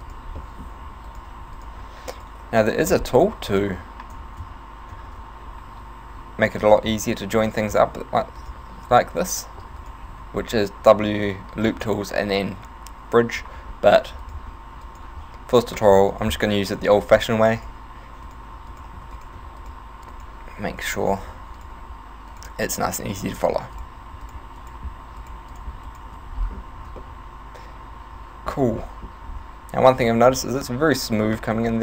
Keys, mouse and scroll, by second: 0.1 shift+right click, 0.4 shift+middle click, 1.1 shift+right click, 1.5 f, 1.6 right click, 2.2 shift+right click, 2.7 shift+right click, 3.3 f, 3.5 right click, 4.4 ctrl+z, 5.1 ctrl+z, 6.7 shift+right click, 7.5 f, 7.7 right click, 8.4 shift+right click, 8.9 right click, 9.9 shift+right click, 10.1 f, 10.4 w, 14.3 right click, 14.9 shift+right click, 15.7 shift+right click, 16.1 shift+right click, 16.8 f, 17.0 right click, 17.6 shift+right click, 18.3 right click, 18.7 shift+right click, 19.0 f, 19.2 right click, 19.6 shift+right click, 20.1 shift+right click, 20.9 shift+right click, 21.0 f, 21.1 right click, 21.6 shift+right click, 22.4 shift+right click, 22.9 shift+right click, 23.2 f, 23.3 right click, 24.3 shift+right click, 24.6 shift+right click, 25.3 shift+right click, 25.5 shift+right click, 25.9 shift+right click, 26.2 f, 26.4 scroll down 7, 26.8 Tab, 27.1 middle click, 28.9 middle click, 29.3 Tab, 29.3 scroll up 2, 29.9 Tab, 30.1 middle click, 31.4 middle click.